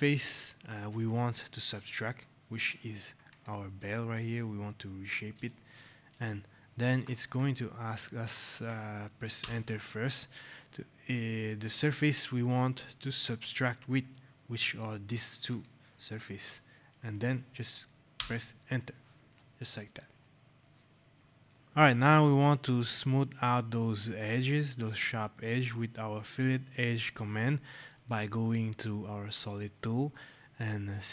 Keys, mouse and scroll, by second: 3.2 click, 4.2 right click, 6.2 shift+click, 9.3 Return, 14.5 click, 16.3 right click, 18.1 Return, 19.3 right click, 21.3 click.